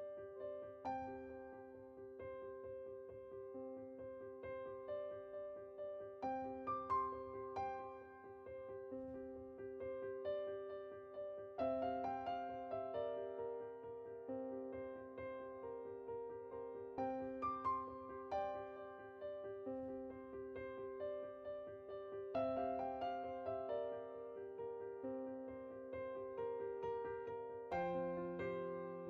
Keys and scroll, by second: 9.1 Tab.